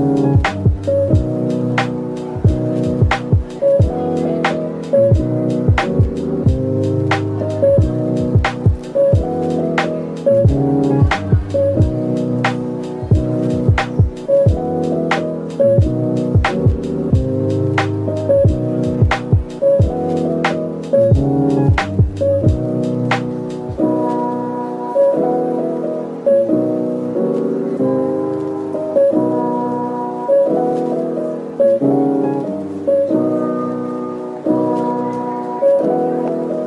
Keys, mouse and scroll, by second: 1.7 typing, 3.6-4.4 scroll down 1, 4.4 Tab, 5.1-5.5 typing, 7.9 middle click, 9.7 typing, 11.5 typing, 13.0 middle click, 13.9 typing, 15.2-16.2 typing, 16.6 middle click, 17.1 Tab, 18.5 right click, 19.4 middle click, 19.9 Tab, 20.5 typing, 21.1 ctrl+b, 23.3 middle click, 24.3 Tab, 28.2 typing, 28.5 Return, 31.0 ctrl+z, 34.6 double click, 36.0 middle click.